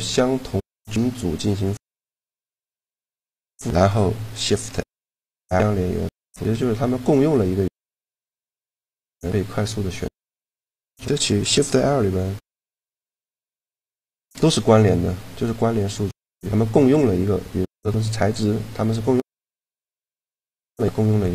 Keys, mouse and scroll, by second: 1.5-3.4 right drag, 3.5 shift+l, 8.7-10.0 middle drag, 10.0-11.8 right drag, 11.5 shift+l.